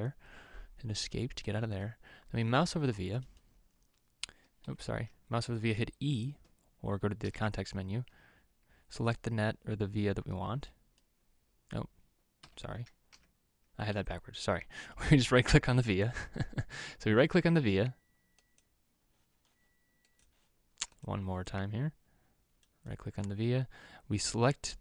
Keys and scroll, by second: 4.9 Escape, 7.6 e, 12.8 Escape, 13.5 e, 14.2 Escape.